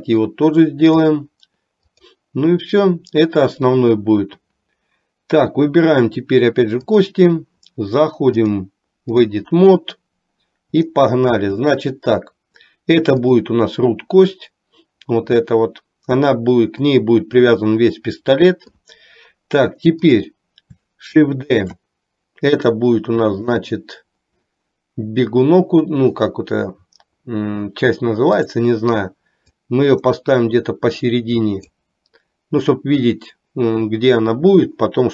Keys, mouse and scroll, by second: 0.0-1.4 drag, 2.0 click, 7.0 click, 8.5-9.5 drag, 10.9 shift+middle click, 21.6 shift+d, 28.5 click, 29.8-31.8 drag.